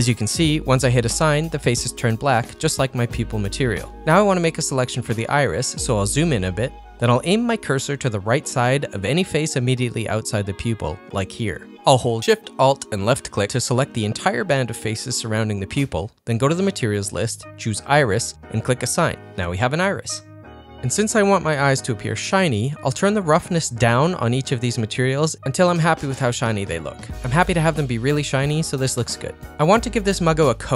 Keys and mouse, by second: 1.1 3, 3.1 ctrl+middle click, 15.6 alt+shift+click, 17.8 click, 19.2-20.4 drag, 20.5 ctrl+middle click, 21.5 Tab, 21.7 middle click, 22.7-24.2 drag, 24.7 middle click, 25.7 click, 26.4 click, 27.4-28.5 drag, 28.6 middle click, 28.6 z, 29.5 middle click, 30.5 ctrl+middle click.